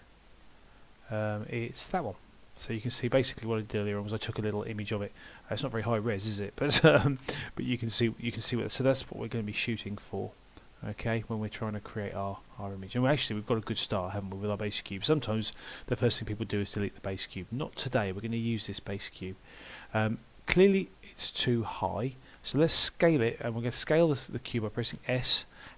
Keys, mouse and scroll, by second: 17.2 click, 20.6 middle click, 23.8 middle click, 25.0 s.